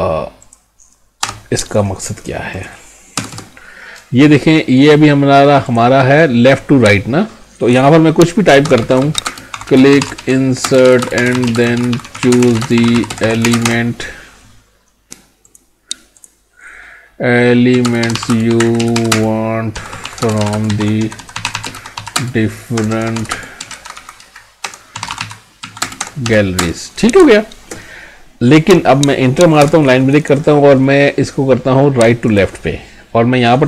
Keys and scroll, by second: 9.3 space, 10.6-13.5 typing, 17.8 space, 18.3 space, 19.1 space, 20.2 space, 20.5 space, 22.2 space, 23.3 space, 25.8 space, 26.6 space.